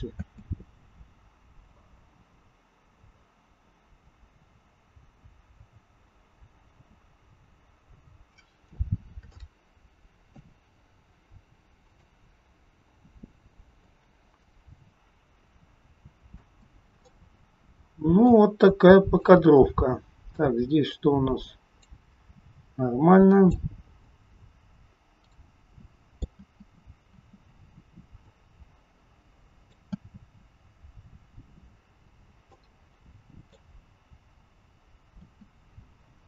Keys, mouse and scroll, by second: 0.1 space, 8.4-8.7 scroll up 3, 9.4 shift+middle click, 12.0 click, 16.5 space, 17.0 middle click, 19.3 click, 22.8 click, 24.0 middle click, 26.3 space, 27.1 space, 28.2 click, 30.0 space, 32.5 middle click, 35.3 space.